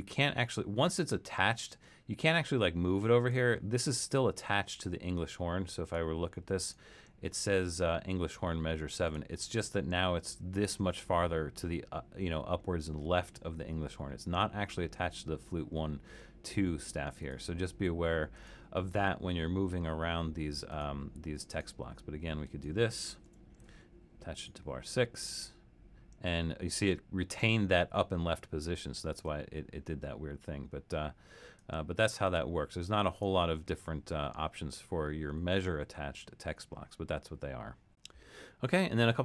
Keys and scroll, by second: 23.3 6.